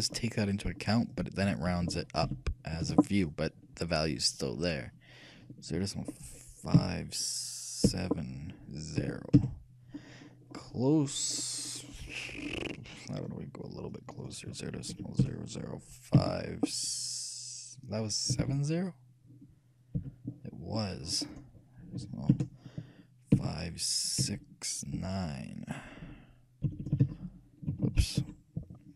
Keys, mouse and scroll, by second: 0.1-1.9 drag, 10.6-15.6 middle drag, 14.1-16.0 drag, 21.3-23.1 drag, 27.0 BackSpace, 27.1 BackSpace.